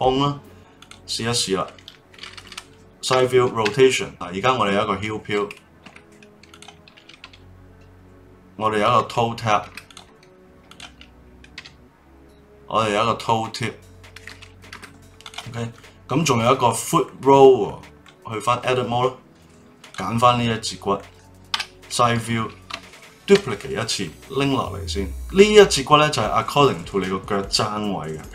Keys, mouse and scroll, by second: 0.8 click, 1.2-3.1 middle drag, 3.1 KP_3, 3.6 r, 6.5 click, 7.2 r, 9.8 click, 10.6 click, 11.5 r, 15.2 click, 15.7-18.1 middle drag, 18.1 Tab, 19.8 click, 20.2-21.5 middle drag, 21.5 KP_3, 23.3 shift+d.